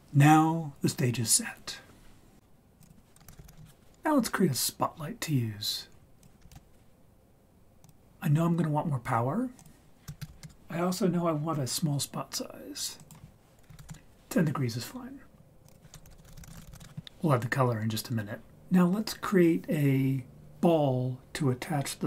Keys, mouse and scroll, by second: 2.8 click, 3.4 o, 6.2 click, 6.5 shift+a, 9.6 click, 10.3 0, 13.0 click, 15.6-16.8 drag.